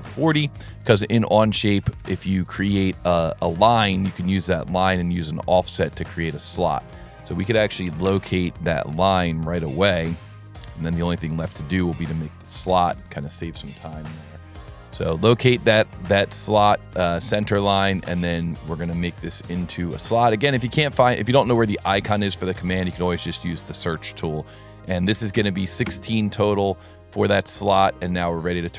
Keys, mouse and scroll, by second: 1.9 s, 3.4 right click, 5.2 click, 6.4 click, 7.0 click, 9.7 click, 11.2 click, 11.9 click, 16.4 click, 18.3 click, 18.8 s, 19.4 t, 20.9 click, 23.7 click, 23.8 click, 27.7 s, 28.5 click.